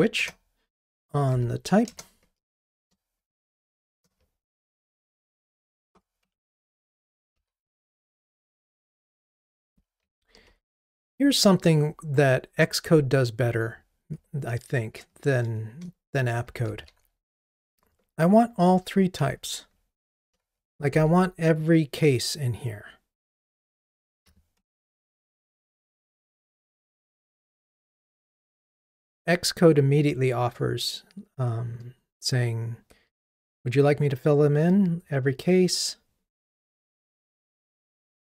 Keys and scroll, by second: 0.2 Return, 5.5 ctrl+i, 6.3 Escape, 8.7 Escape, 8.8 Return, 9.8 super+z, 24.6 Escape, 27.5 Escape.